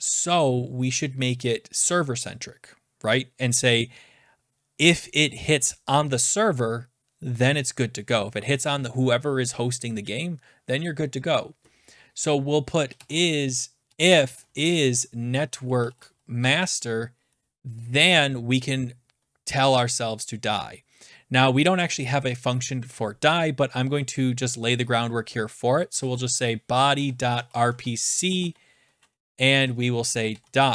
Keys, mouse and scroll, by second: 12.6-16.4 typing, 17.7-18.4 typing, 25.6-30.7 typing.